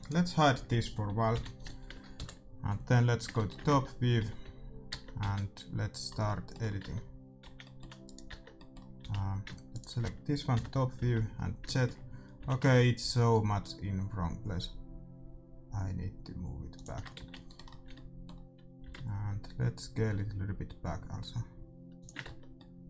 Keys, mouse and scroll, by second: 0.1 right click, 0.3 middle click, 1.3 h, 3.0 middle click, 3.6 Tab, 4.2 z, 4.9 Tab, 5.1 z, 6.8 Tab, 7.4 z, 8.0 right click, 8.2 Tab, 9.0 a, 11.0 z, 11.4-13.7 middle drag, 12.5 g, 17.0 middle click, 17.1 z, 17.3-19.7 middle drag, 18.8 s, 22.2 Tab.